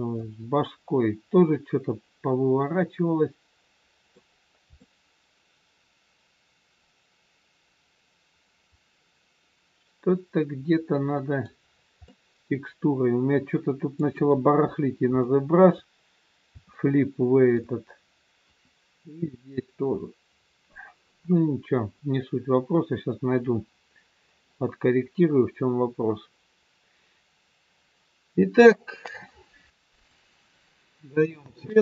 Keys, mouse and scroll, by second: 0.2 middle click, 4.2 scroll down 1, 4.8 middle click, 11.6 scroll down 4, 11.9 middle click, 14.1 KP_1, 14.7 scroll down 2, 15.2 shift+middle click, 17.1 shift+middle click, 17.9-19.7 scroll down 1, 30.2 click.